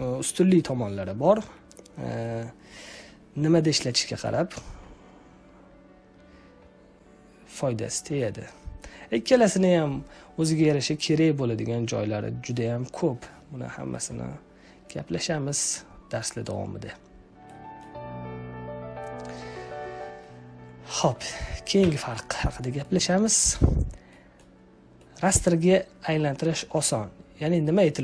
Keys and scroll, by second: 21.7 Delete.